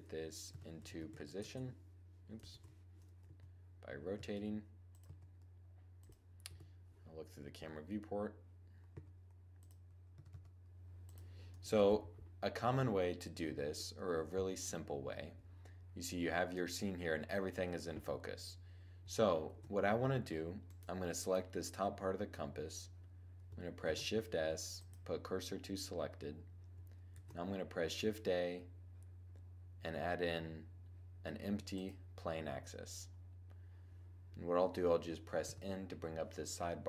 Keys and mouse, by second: 0.1 r, 2.2 z, 3.0 1, 3.8 r, 4.7-8.0 super+drag, 4.7 g, 6.1 0, 8.6 g, 9.3 click, 9.8 r, 11.5 shift+z, 12.3 click, 19.2 shift+z, 20.3-20.8 drag, 23.5 shift+s, 26.8 shift+a, 35.2 n.